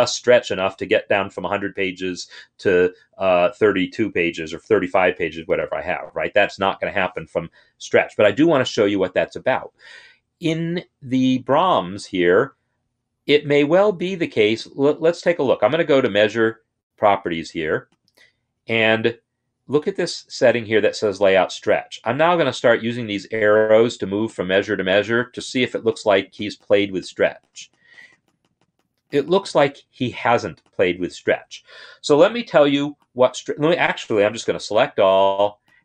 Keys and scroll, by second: 34.2 ctrl+a.